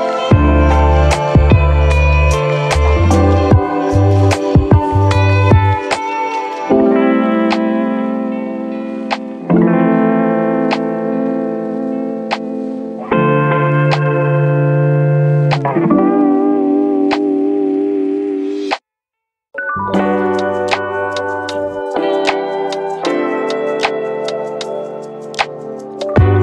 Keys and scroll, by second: 8.0 1, 8.8 ctrl+c.